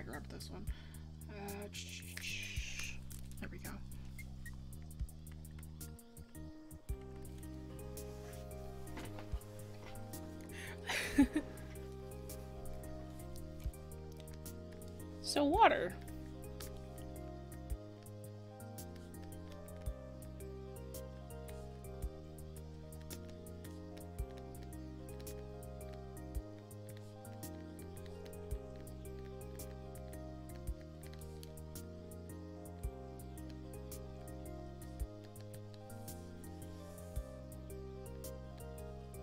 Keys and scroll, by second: 3.7 ctrl+z, 22.0 ctrl+z.